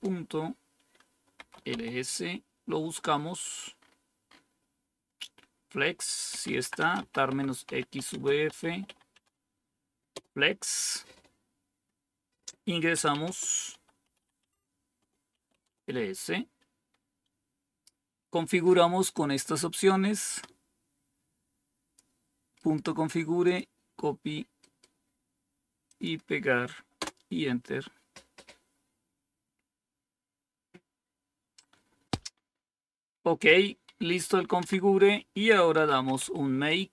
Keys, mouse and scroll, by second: 1.0-1.8 typing, 3.1 scroll up 1, 3.7-4.3 scroll up 2, 4.8-10.5 typing, 5.0-6.2 scroll up 1, 12.8-15.7 typing, 14.9 Return, 19.3-21.9 drag, 22.7 right click, 23.4 click, 25.8 click, 26.9 Return, 34.5 Down, 35.4-36.6 typing.